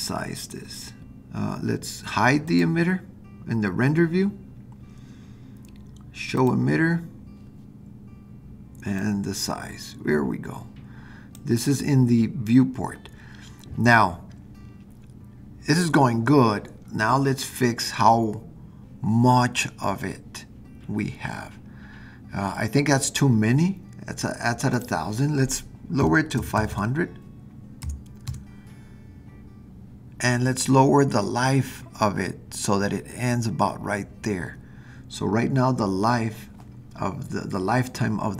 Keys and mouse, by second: 2.5 click, 6.4 click, 9.0-11.4 drag, 24.7-29.6 drag, 26.5 KP_0, 27.0 KP_0.